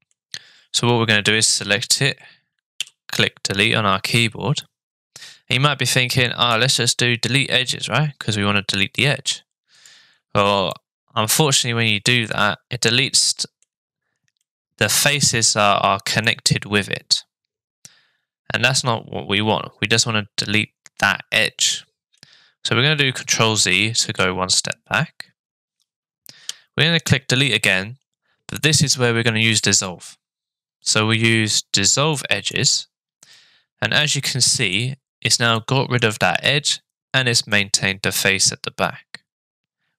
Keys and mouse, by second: 2.8 Delete, 10.7-13.6 middle drag, 14.4 middle click, 16.2-22.2 middle drag, 24.0 ctrl+z, 26.4 Delete, 33.3-34.7 middle drag, 35.5 middle click, 36.4 middle click, 37.5-39.9 middle drag.